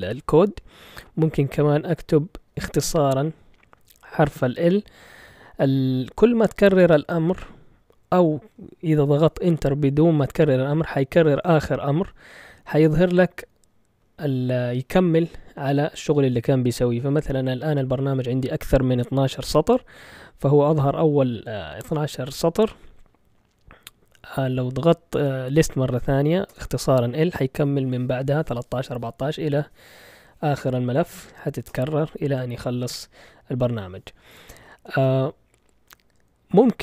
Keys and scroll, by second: 2.5 typing, 9.0 BackSpace, 12.1 typing, 26.5 Return, 31.7 Return, 34.8 ctrl+l.